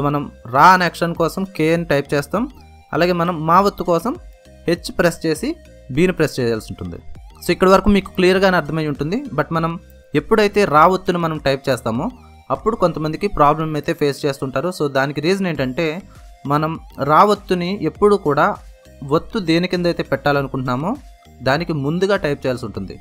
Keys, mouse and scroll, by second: 0.3 k, 3.6 h, 6.4 b, 8.5 typing, 10.5 typing.